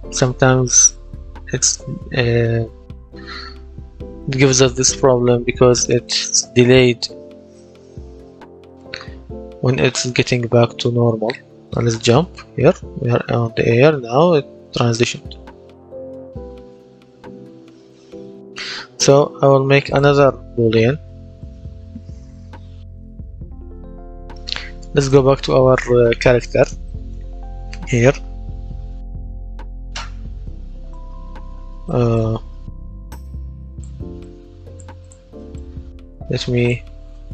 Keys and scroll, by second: 3.1 w, 11.3 w, 11.9 space, 15.0 a, 18.0 Escape, 23.6 F10, 36.8-37.3 typing.